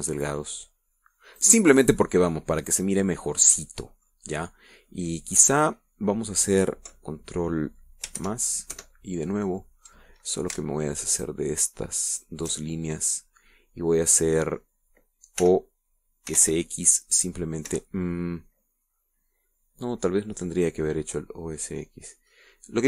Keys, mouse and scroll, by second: 2.8 click, 2.9 middle click, 3.2 scroll down 2, 3.4-5.6 middle drag, 5.8 scroll down 1, 6.3-6.7 scroll up 1, 9.6 ctrl+KP_Add, 12.5 alt+shift+right click, 13.5 alt+shift+right click, 14.1-16.1 alt+shift+middle drag, 16.8 o, 17.7 s, 17.8 x, 19.0 Escape.